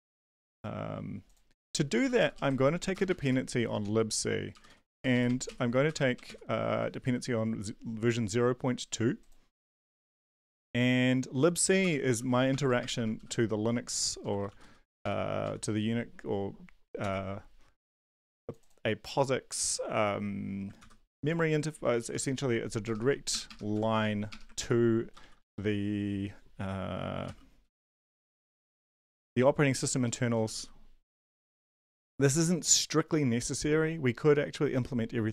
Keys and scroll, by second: 1.9 Down, 2.0 Down, 2.2 Down, 2.5 ctrl+v, 2.9-5.4 typing, 5.5 ctrl+s, 5.8 Return, 6.2 ctrl+s, 11.8 Return, 11.9-15.5 typing, 17.0 ctrl+s, 20.8 ctrl+c, 22.0 Down, 22.2 shift+Tab, 22.2 `, 22.8 BackSpace, 23.0 BackSpace, 23.3 BackSpace, 23.7 shift+Tab, 23.9 shift+Tab, 24.6 ctrl+v, 25.2 typing, 27.0-32.2 typing.